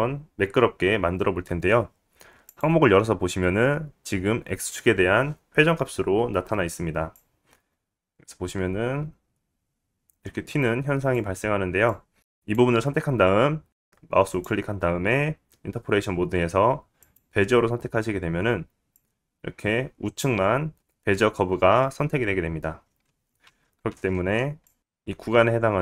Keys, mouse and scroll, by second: 8.4 click, 12.2 click, 12.3 right click, 13.7 click, 13.7 middle click, 13.7-15.5 right drag, 14.3-15.5 drag, 14.3-15.5 middle drag, 20.2 click, 22.9 ctrl+z, 23.0 ctrl+z, 23.7 click.